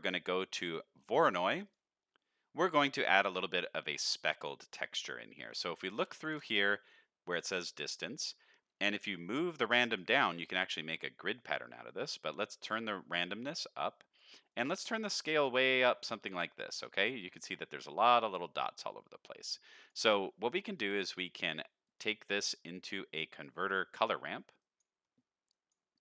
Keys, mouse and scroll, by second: 2.0 middle click, 2.6 click, 3.4 scroll up 1, 5.4 middle click, 5.7-6.0 scroll up 1, 6.2 ctrl+shift+click, 8.3-8.9 scroll up 2, 8.9-10.0 drag, 10.3 middle click, 12.4-14.2 drag, 14.5-16.8 drag, 17.2 scroll up 1, 17.4 middle click, 19.2 middle click, 19.7 click, 20.1 middle click, 20.4 scroll down 2, 20.9 shift+a, 24.6 click, 25.0 middle click, 25.5 click.